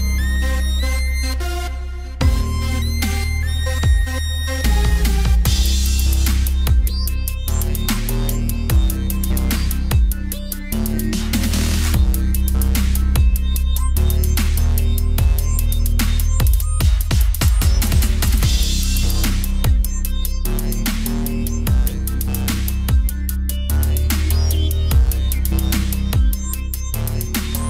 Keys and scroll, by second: 2.6 ctrl+z, 4.0 ctrl+z, 11.4 ctrl+t, 14.5 ctrl+z, 21.7 ctrl+alt+shift+e.